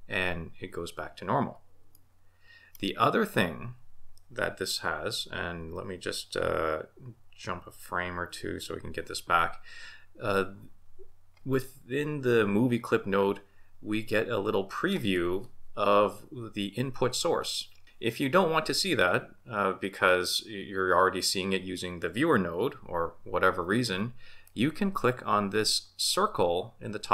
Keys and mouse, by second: 2.0 middle click, 7.4 Right, 8.3 Left.